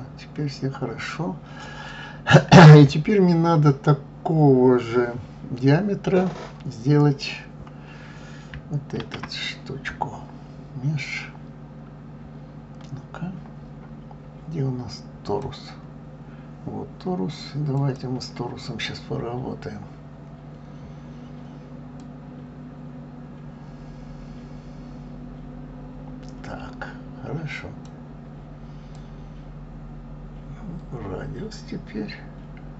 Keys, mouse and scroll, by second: 2.8 scroll up 1, 2.9-5.9 middle drag, 9.0 shift+a, 17.8 click, 22.0-25.0 drag, 28.9-32.0 drag.